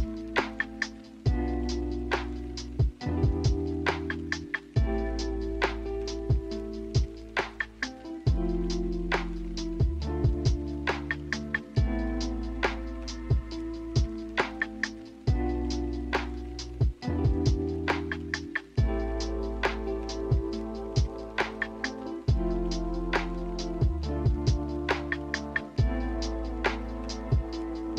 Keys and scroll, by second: 12.6 1, 26.1-27.0 typing.